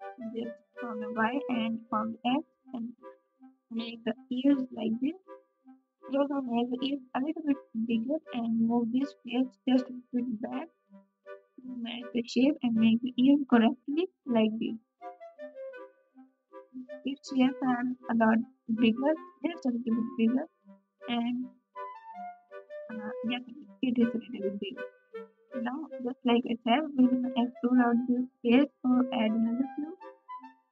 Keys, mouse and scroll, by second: 1.6 KP_3, 2.4 r, 7.6 3, 11.9 r, 14.4 e, 14.4 g, 15.0 s, 18.4 KP_7, 23.7 s, 24.6 g, 27.9 3.